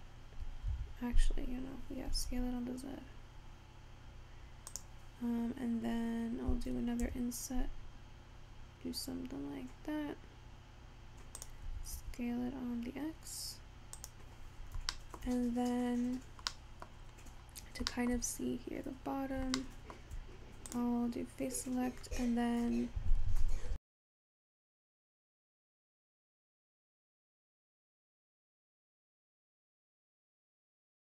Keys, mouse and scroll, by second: 2.1 s, 7.0 i, 11.7 s, 14.8 shift+scroll down 1, 15.0 shift+middle click, 15.6-16.5 scroll up 14, 16.5 middle click, 17.1-18.0 scroll down 6, 18.0 shift+middle click, 18.4 scroll up 2, 19.6-20.7 shift+middle drag, 20.7 click, 27.8 i.